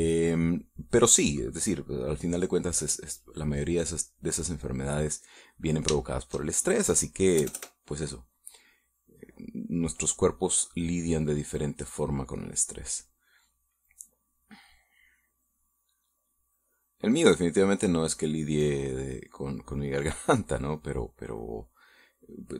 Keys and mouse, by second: 1.0 click, 3.3 middle click, 4.3-5.3 drag, 5.4 middle click, 6.7 shift+middle click, 8.3 KP_Add, 10.1-11.1 drag, 11.3 click, 12.1 click, 13.3 click, 15.1 middle click, 17.1-18.7 drag, 18.7-20.3 middle drag, 20.6 middle click, 21.3 middle click, 22.3-22.5 drag.